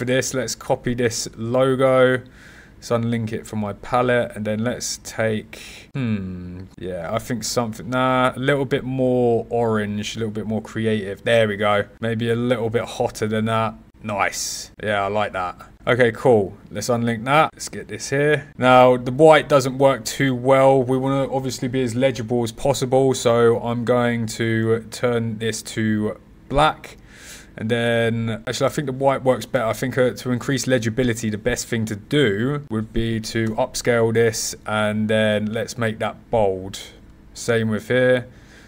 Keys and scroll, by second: 28.3 super+z, 32.8-33.7 typing.